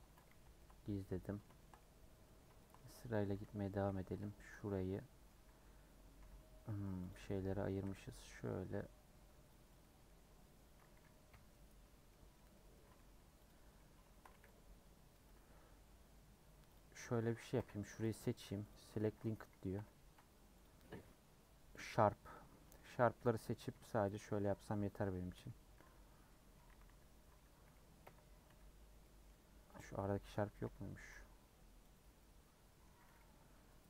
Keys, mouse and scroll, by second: 0.0 Tab, 0.3 h, 0.5 scroll down 1, 0.6-1.9 middle drag, 1.9 scroll down 1, 2.2 middle click, 3.1 click, 4.1 /, 4.5 Tab, 4.7-6.2 middle drag, 6.2 3, 6.4 scroll down 1, 6.6 middle click, 7.1 click, 7.2-7.5 scroll up 1, 7.9 c, 9.8 middle click, 10.2-10.7 scroll up 2, 11.3 ;, 11.7 scroll down 2, 12.1 middle click, 12.7 scroll up 3, 12.9 3, 13.5 click, 14.4 c, 15.5 a, 16.7 Left, 17.5 l, 19.7 l, 21.7 click, 22.3-23.7 middle drag, 23.7 ;, 24.2 scroll down 1, 24.3-25.3 middle drag, 25.3 l, 26.3 middle click, 26.7 a, 26.8 a, 28.0 l, 29.0 middle click, 29.4-29.8 scroll up 1, 29.8 Left, 30.3 3, 30.6 Left, 31.1 c, 32.2-33.5 middle drag, 33.5 ;.